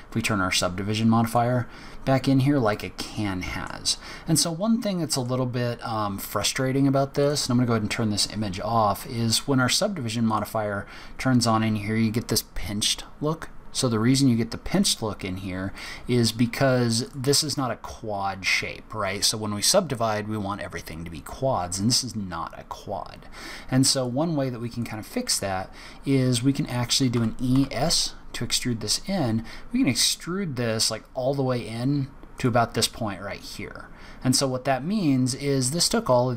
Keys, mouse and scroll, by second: 1.2 click, 2.1-2.4 scroll up 1, 2.6 middle click, 2.6-3.0 scroll up 1, 4.7 middle click, 4.7-5.1 scroll up 1, 7.1 click, 7.9 scroll down 4, 8.1-8.6 scroll up 4, 8.9 middle click, 10.2 click, 14.6 click, 15.7 click, 17.0 click, 23.9 click, 24.7 click, 27.1 e, 33.0-33.7 scroll up 3, 33.7-34.3 scroll up 1, 34.3 scroll down 2, 34.3-35.1 scroll down 5.